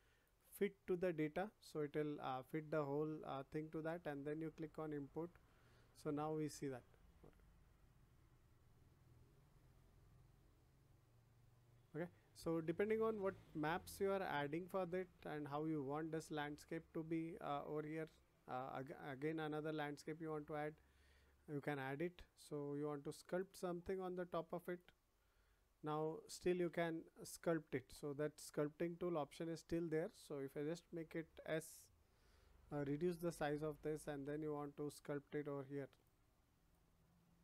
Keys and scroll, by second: 26.6 ctrl+z, 32.6 [.